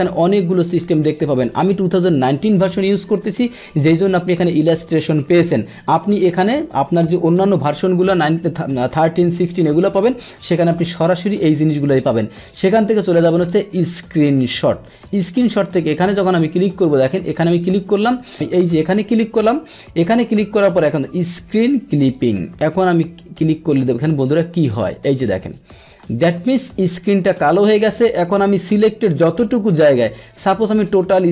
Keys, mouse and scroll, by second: 3.1 click, 5.8 click, 14.9 click, 17.1 click, 18.8 click, 22.1 click, 30.8-31.3 drag.